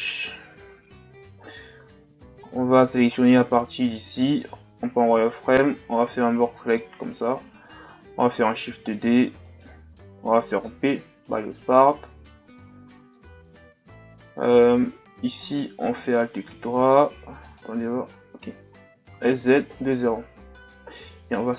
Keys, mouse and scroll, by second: 0.6 KP_Divide, 1.5-1.9 scroll up 5, 1.9 Tab, 2.4-3.0 shift+scroll down 6, 3.1-4.3 shift+scroll down 4, 4.5 z, 5.8 b, 8.9 shift+d, 10.8 p, 12.9 z, 13.7 Tab, 14.6 Tab, 15.4 alt+right click, 17.0 Tab, 17.4 right click, 18.0 Tab, 19.1 s, 21.3 s.